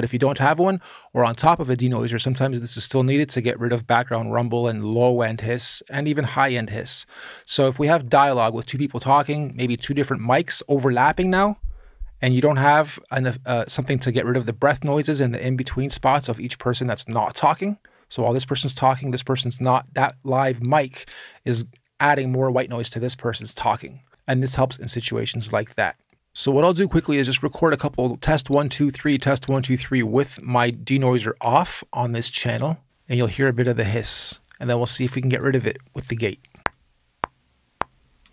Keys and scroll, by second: 36.3 r, 38.0 k.